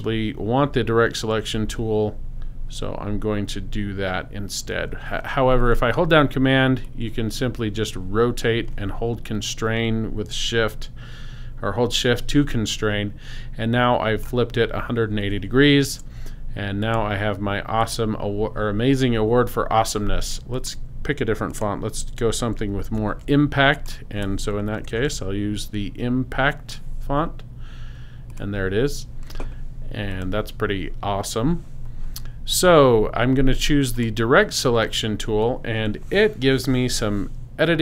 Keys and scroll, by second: 22.8 super+a, 24.6-25.6 typing.